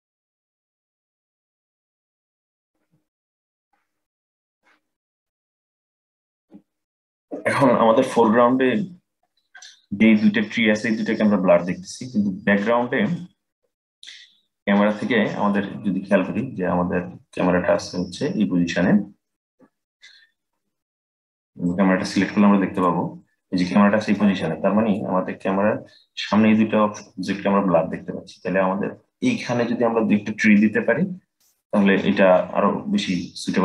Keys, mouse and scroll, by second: 3.3 click, 11.8-12.9 scroll down 2, 12.9-13.9 middle drag, 13.9-14.6 scroll down 7, 14.6-19.1 middle drag, 20.4-22.4 middle drag, 22.4 click, 23.8-25.3 middle drag, 25.3-27.0 scroll up 3, 27.0-27.8 scroll up 2, 27.8-28.9 scroll down 6, 31.0 scroll down 1, 31.1-33.6 middle drag.